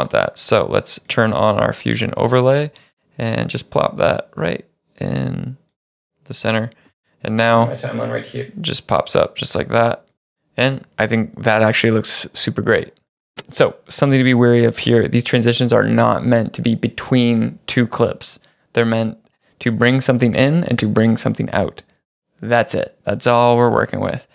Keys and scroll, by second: 9.4 space, 10.0 space, 11.6 space.